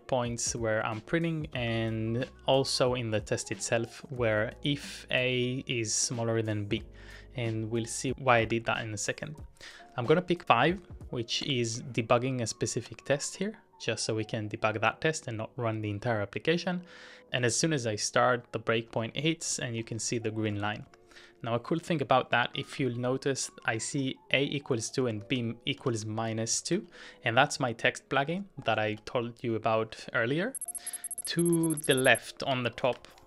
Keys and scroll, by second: 0.0-2.2 typing, 6.4-7.0 typing, 8.1-9.1 typing, 11.4 typing, 12.8 typing, 17.4 typing, 18.5-20.8 typing, 22.7 ctrl+w, 22.8 h, 30.1 Return, 31.3 ctrl+w, 31.4-33.2 typing, 31.6 ctrl+w, 32.0 ctrl+w.